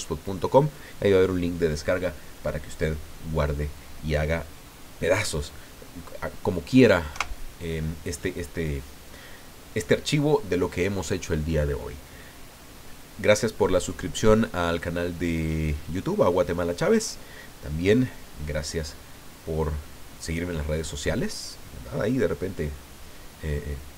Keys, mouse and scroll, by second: 7.1 KP_0.